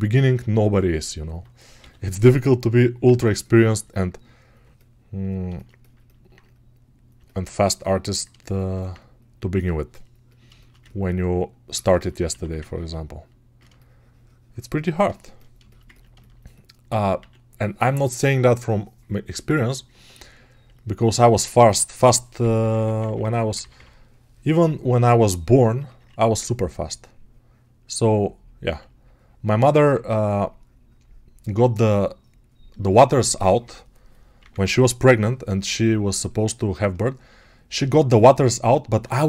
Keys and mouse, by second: 10.6-15.5 ctrl+alt+right drag.